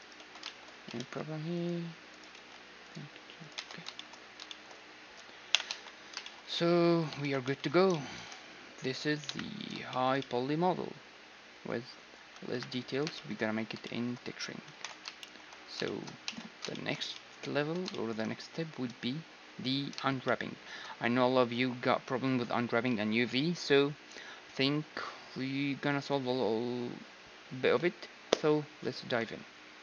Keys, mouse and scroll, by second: 0.6 ctrl+r, 1.6-3.2 middle drag, 2.0 ctrl+r, 3.2 Tab, 5.1 ,, 5.3 a, 7.1 shift+z, 8.5 middle click, 9.0 KP_1, 9.6-11.6 middle drag, 12.8-21.6 middle drag, 12.8 KP_1, 14.4 ctrl+s, 16.0 z, 18.6 z.